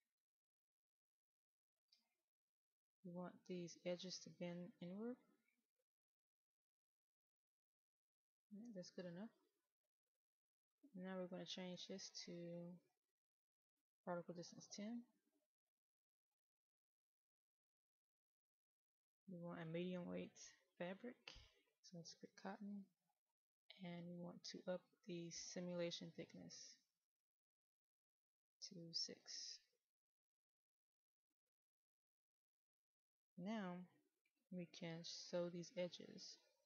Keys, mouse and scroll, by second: 30.3 KP_6, 36.3 middle click.